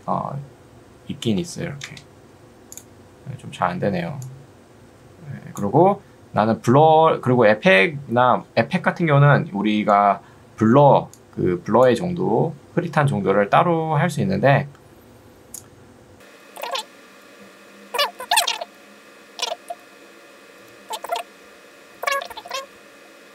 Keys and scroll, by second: 1.3-2.2 typing, 13.3 Escape.